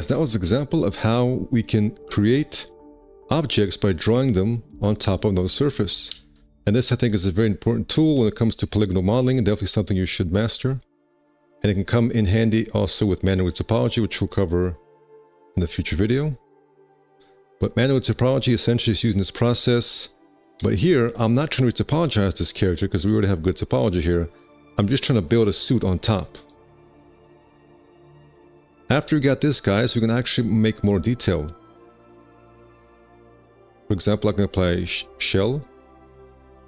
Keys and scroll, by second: 1.2 space, 1.7 F4, 4.6 F4, 7.8 space, 8.1 1, 9.4 alt+c, 13.4 x, 17.1 space, 19.1 alt+q, 19.7 F4, 21.5 1, 24.5 alt+q, 32.0 alt+q, 36.1 space.